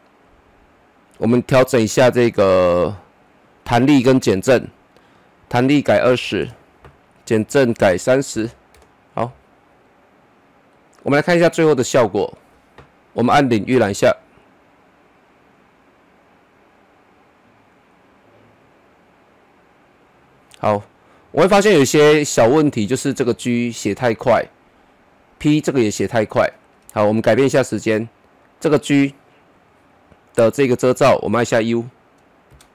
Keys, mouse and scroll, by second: 1.6 double click, 3.1 click, 5.5 click, 6.1 KP_2, 6.4 Return, 7.6 click, 8.3 KP_3, 8.7 Return, 9.7 Return, 10.1 scroll down 1, 10.7-13.8 middle drag, 13.8 KP_0, 21.7-28.3 drag, 31.5 typing.